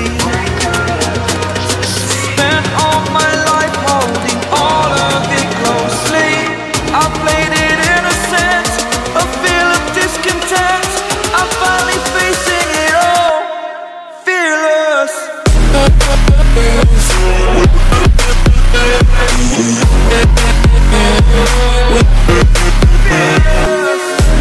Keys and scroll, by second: 13.0 ctrl+g, 23.2 ctrl+j.